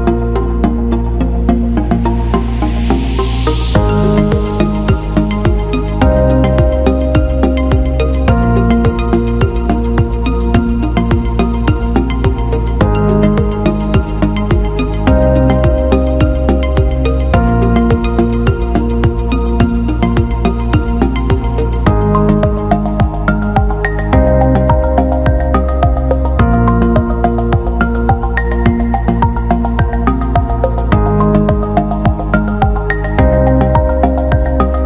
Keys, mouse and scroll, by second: 0.2 alt+middle click, 2.2 shift+click, 2.9 shift+click, 3.5 alt+shift+middle click, 4.7 shift+d, 6.9 p, 9.9 click, 11.0 Tab, 11.7 click, 12.7 click, 12.8-18.1 drag, 19.2 alt+middle click, 19.9 alt+shift+middle click, 20.3 alt+middle click, 21.7-24.0 right drag, 27.3 click, 28.5 alt+middle click, 29.3 click, 30.2-32.0 alt+middle drag, 33.7-34.2 alt+middle drag, 34.6 alt+shift+middle drag.